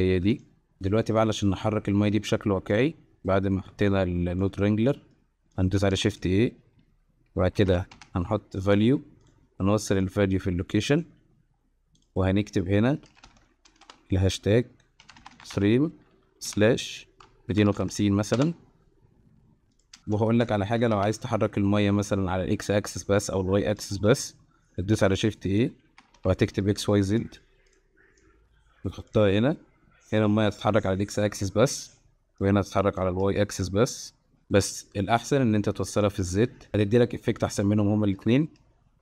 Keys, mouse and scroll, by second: 1.2-2.1 middle drag, 2.8 middle click, 4.0-4.4 drag, 5.0 middle click, 5.5 click, 5.9 shift+a, 10.2-11.0 drag, 11.9-18.4 drag, 19.8 click, 20.0 shift+a, 20.2 shift+a, 24.9 shift+a, 28.3 click, 32.3 space, 32.4 click, 32.6 click, 33.4 space, 34.8 click, 34.8 space, 34.9 click, 36.0 click.